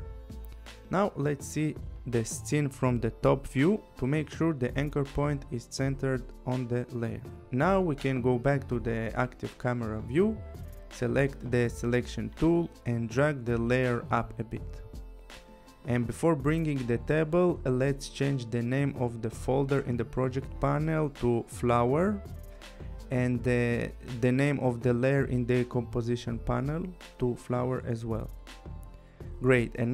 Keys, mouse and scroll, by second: 2.2 click, 3.4 click, 4.8-5.2 scroll, 8.1 click, 9.3 click, 12.7 click, 14.2 click, 19.3 click, 20.0 click, 20.3 Return, 21.6-23.4 typing, 24.2 Return, 24.8 click, 26.0 click, 26.3 Return, 26.7-27.8 typing, 27.9 Return.